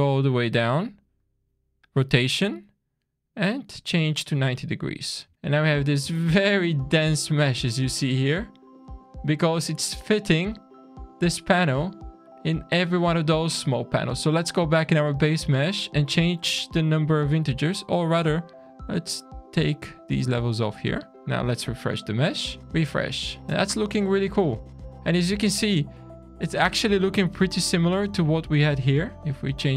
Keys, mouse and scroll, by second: 0.8 click, 2.5 click, 3.6 middle click, 4.2 alt+a, 4.3 scroll down 1, 4.5 scroll up 6, 5.3 shift+middle click, 5.3 scroll down 3, 8.0-8.4 scroll up 3, 8.4-8.8 scroll down 3, 8.9-9.2 scroll up 3, 10.2 scroll down 3, 10.7 middle click, 11.4-11.7 scroll up 2, 11.7 middle click, 12.2 click, 13.9-14.4 scroll down 3, 14.4 middle click, 14.9-15.2 scroll up 3, 15.8 scroll down 2, 16.2 middle click, 18.3 click, 18.8 click, 19.2-19.7 scroll down 6, 20.0 scroll up 2, 20.8 shift+middle click, 21.1 click, 21.1 shift+scroll down 1, 21.1 q, 22.0 alt+a, 22.4 shift+middle click, 22.6 scroll down 1, 22.7 scroll down 1, 22.9 shift+middle click, 24.9-25.5 scroll down 2, 25.5 middle click, 26.0 click, 27.5 click, 27.9 click, 29.2 click, 29.6 shift+middle click.